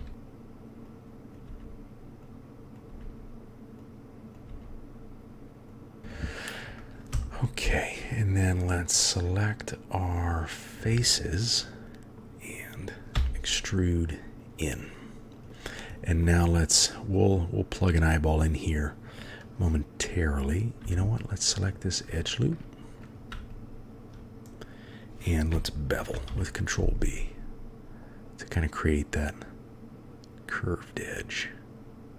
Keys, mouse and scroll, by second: 1.5 g, 2.9 g, 4.5-6.0 g, 7.1 3, 7.8 click, 9.2-10.1 drag, 11.8 click, 13.2 e, 15.3 click, 16.2 middle click, 20.8 2, 21.1 click, 21.7 click, 22.2 shift+click, 23.1 click, 26.1 ctrl+b.